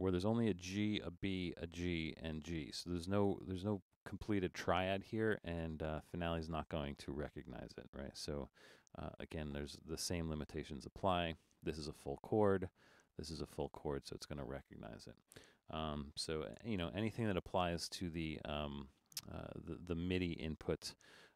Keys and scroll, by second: 16.6 BackSpace.